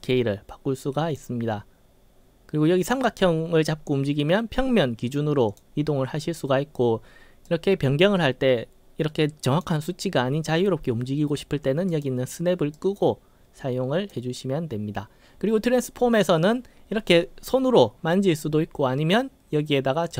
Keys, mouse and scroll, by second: 3.3-5.7 drag, 7.5-9.7 drag, 12.0 click, 12.8-14.2 drag.